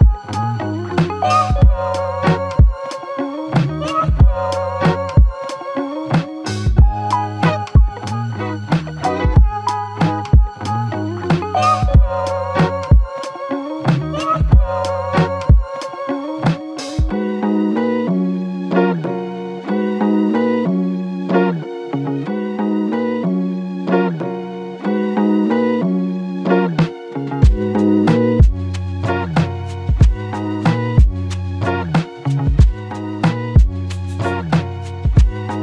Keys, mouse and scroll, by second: 23.3 f, 24.7 double click, 32.8 ctrl+alt+click, 34.2 alt+click.